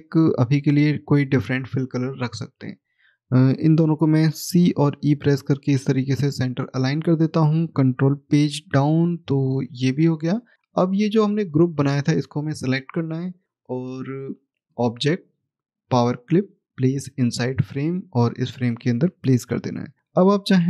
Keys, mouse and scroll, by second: 0.4 click, 3.1 shift+click, 4.3 c, 4.8 e, 5.9 click, 10.6 click, 14.5 click.